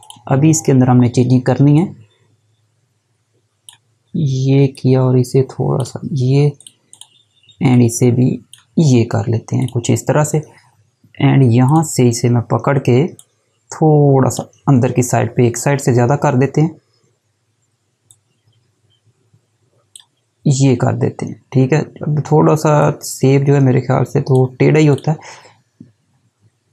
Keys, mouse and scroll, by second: 18.1 click, 22.8 click.